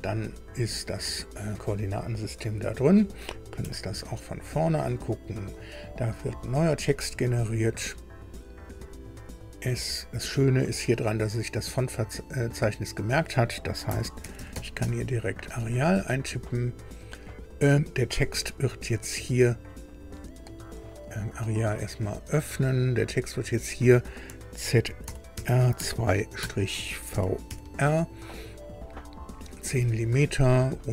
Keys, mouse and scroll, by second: 3.5 KP_1, 4.6-5.0 scroll up 2, 8.6 click, 10.9 click, 12.9 click, 13.6-15.2 typing, 16.2 click, 18.0 click, 19.3 click, 21.9 click, 23.2 click, 24.7-27.9 typing.